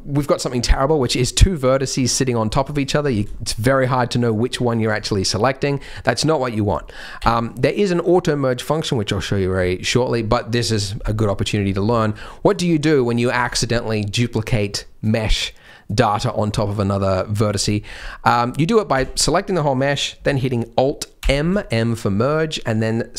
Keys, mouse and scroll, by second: 1.3 g, 2.1 click, 3.0 click, 3.0 scroll down 3, 3.2 click, 3.3 shift+middle click, 3.7 click, 4.1 click, 5.6 click, 7.1 a, 9.7 shift+middle click, 11.2 middle click, 11.6-12.4 scroll up 4, 11.9 shift+middle click, 12.4 click, 12.7 g, 17.9 middle click, 18.7-20.2 scroll down 4, 18.9 a, 21.1 alt+m.